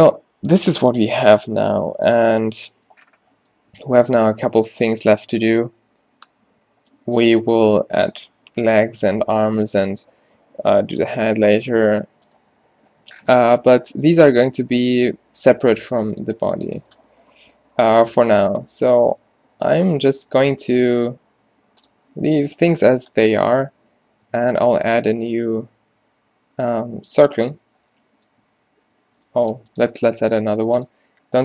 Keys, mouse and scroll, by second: 8.1 middle click, 13.7 a, 14.2-16.5 middle drag, 18.4 Tab, 20.1 Tab, 20.6 a, 22.5-23.6 middle drag, 23.9 a, 24.4 shift+a, 28.5 Tab, 29.0 Tab, 29.4 x, 30.0 shift+a.